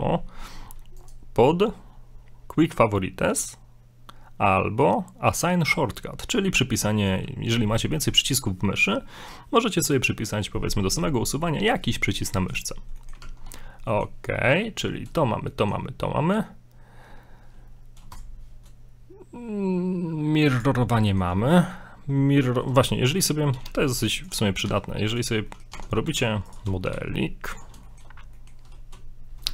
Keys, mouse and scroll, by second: 13.0 middle click, 13.2 Tab, 13.5-13.8 scroll down 3, 13.9 middle click, 15.5 shift+middle click, 16.1-16.7 scroll up 1, 18.1 shift+right click, 20.5 x, 20.8 scroll up 3, 21.1 middle click, 21.4 shift+middle click, 23.5 shift+a, 24.6 s, 25.5 middle click, 25.7 middle click, 25.8 Tab, 26.1 ctrl+r, 26.9 g, 27.9 shift+middle click, 28.2 shift+middle click, 28.4 scroll down 1.